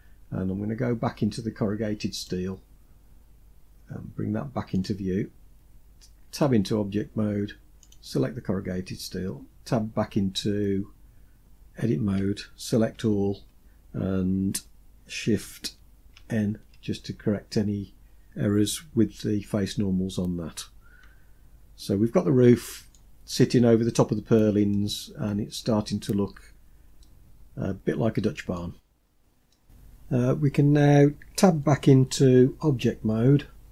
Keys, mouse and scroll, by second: 1.4 click, 4.0 click, 5.6 Tab, 7.1 click, 8.6 Tab, 12.2 a, 15.4 shift+n, 21.0-22.2 middle drag, 23.9 middle click, 26.2-27.8 middle drag, 28.2-28.6 scroll down 2, 28.7-29.2 middle drag.